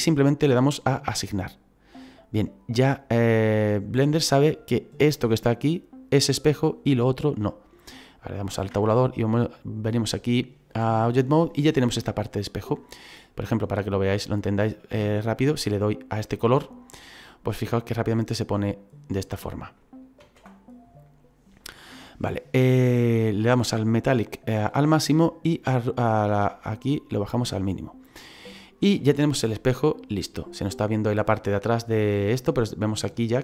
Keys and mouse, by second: 1.4 click, 8.6 Tab, 9.1 click, 13.4 click, 20.2 ctrl+z, 26.0 click, 29.3 middle click.